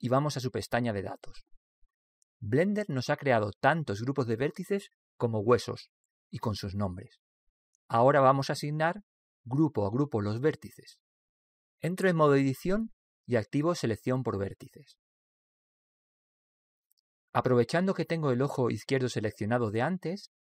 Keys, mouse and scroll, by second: 2.1-5.5 drag, 6.0 click, 10.7-12.7 middle drag, 13.6 Tab, 15.8 click.